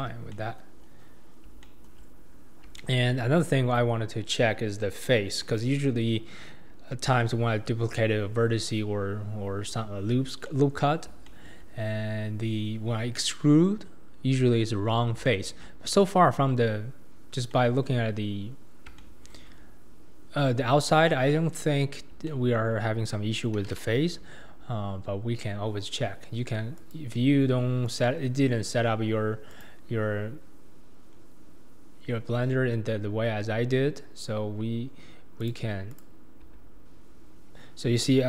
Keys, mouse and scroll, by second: 0.0 Tab, 0.3-0.8 middle drag, 0.8-1.5 scroll down 6, 1.6-5.8 shift+middle drag, 10.5-11.8 middle drag, 11.8-14.8 scroll up 1, 15.2-15.8 shift+middle drag, 15.8-16.7 scroll up 2, 16.7-17.2 scroll up 1, 17.2 scroll down 2, 17.5-19.6 middle drag, 19.6-20.6 scroll up 2, 20.6-21.3 scroll down 3, 21.3-25.3 middle drag, 26.8 click, 29.5-32.7 drag, 35.4 click, 35.9 click, 36.5 q.